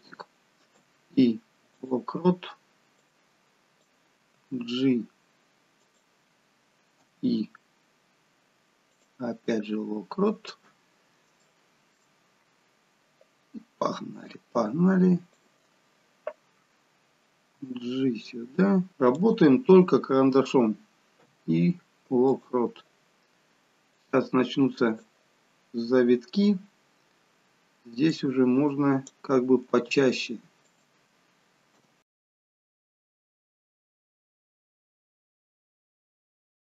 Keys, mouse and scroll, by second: 0.7 i, 3.0 click, 4.4 g, 7.0 i, 9.8 scroll down 2, 9.8 i, 11.0 scroll up 2, 11.5 shift+middle click, 12.2 scroll down 1, 14.3 click, 17.5 g, 21.2 i, 24.0 click, 28.1 click, 29.7 g, 31.8 i, 32.8 click, 33.7 g, 34.5 i, 35.2 click, 35.7 g.